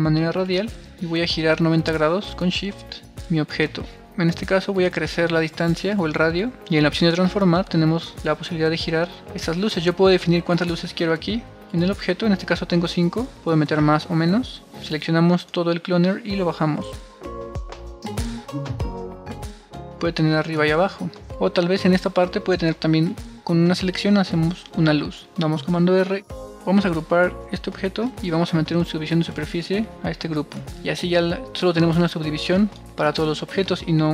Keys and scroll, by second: 4.2 super+z, 25.1 super+r, 27.8 alt+g.